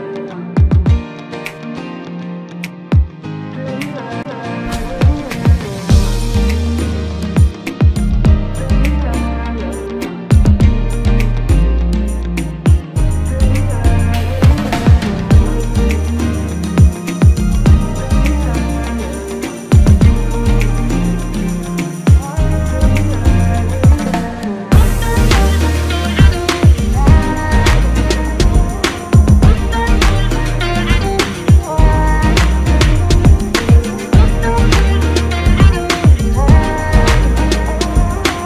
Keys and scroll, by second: 1.3 Right, 3.3 Left, 6.4 ctrl+shift+g, 31.4 ctrl+z, 33.9 ctrl+z, 35.9 ctrl+KP_Add, 36.5 typing.